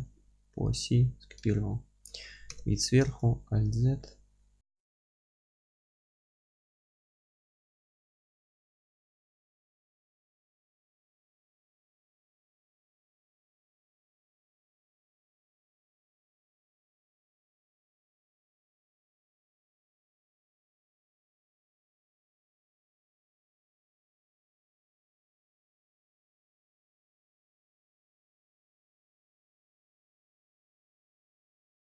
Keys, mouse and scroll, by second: 0.7 click, 0.9-5.1 middle drag, 2.5 KP_7, 3.1 alt+z, 3.5-4.0 scroll up 1, 4.4 g, 5.1 click, 5.2 middle click, 5.3 scroll down 1, 5.8 1, 6.1 click, 6.3 g, 6.8 click, 6.9 Tab, 7.0-10.3 alt+middle drag, 7.2 scroll up 1, 7.3 F3, 7.5 scroll down 1, 7.6 alt+z, 8.1 F3, 8.4-8.8 scroll down 2, 9.1 z, 9.4-10.3 scroll up 1, 10.3 click, 10.6-12.4 alt+middle drag, 10.8 alt+z, 11.5-12.2 scroll down 1, 12.4 scroll up 2, 12.7 scroll down 2, 12.9-13.9 alt+middle drag, 12.9 scroll up 1, 13.9-14.4 scroll up 2, 14.4 scroll down 2, 14.6-15.0 alt+middle drag, 15.0 scroll down 2, 15.1 middle click, 15.2 scroll up 2, 15.3 click, 15.5 alt+middle click, 15.8 scroll up 2, 16.0-25.7 middle drag, 19.7-20.1 scroll up 2, 22.0 scroll down 2, 22.9-23.8 scroll down 4, 25.7 Tab, 25.8 click, 26.0 alt+q, 26.2 scroll up 1, 26.4-31.7 alt+middle drag, 26.8-27.2 scroll up 1, 27.2-27.6 scroll down 1, 27.7-28.7 scroll up 1, 29.2 scroll down 2, 29.4 scroll up 2, 29.5 scroll down 2, 29.7 scroll up 2, 30.2 alt+q, 31.2-31.7 scroll up 2, 31.7-31.8 shift+right drag.